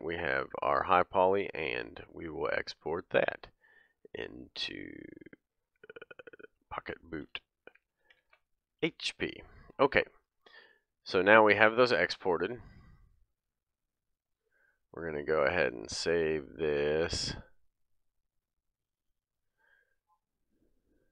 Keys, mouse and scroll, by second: 1.2-21.1 drag.